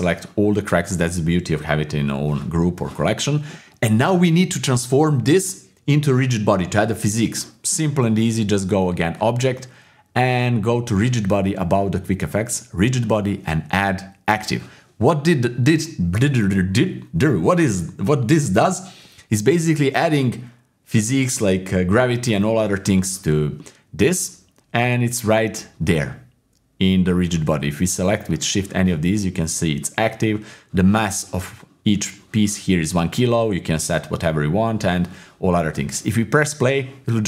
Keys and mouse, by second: 9.1-14.4 drag, 23.6 middle click, 25.4 click, 28.3 shift+right click.